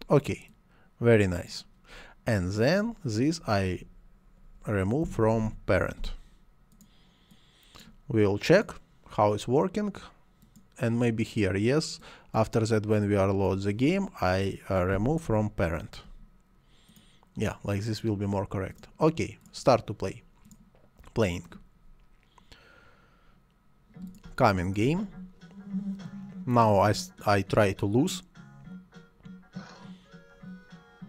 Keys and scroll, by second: 4.8-6.1 typing, 14.7-16.4 typing, 24.2 space.